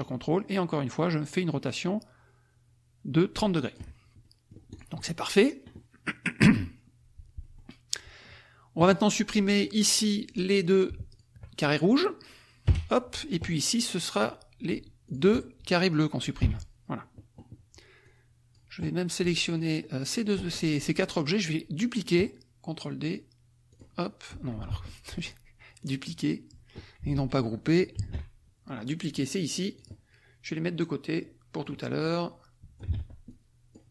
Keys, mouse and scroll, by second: 4.2 ctrl+click, 6.4 click, 7.4 click, 7.9 click, 9.0 click, 10.4 click, 11.1 shift+click, 12.7 Delete, 14.1 click, 15.1 shift+click, 16.4 Delete, 18.0 click, 19.5 shift+click, 23.7 click, 24.6 ctrl+z, 25.2 ctrl+click, 25.9 click, 28.0 ctrl+shift+g, 29.8 click, 30.5-31.8 drag, 32.0 click, 32.9 ctrl+z, 33.2 ctrl+click.